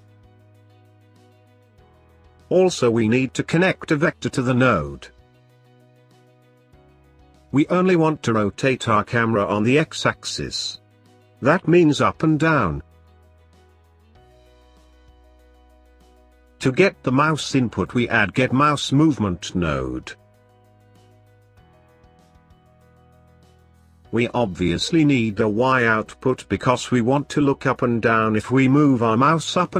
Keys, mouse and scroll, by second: 2.2 shift+a, 6.9-10.2 drag, 10.2-12.9 middle drag, 12.9 click, 13.9-15.0 drag, 15.3-17.4 middle drag, 17.4 shift+a, 23.0 scroll up 1, 23.1-26.1 middle drag, 26.6 click.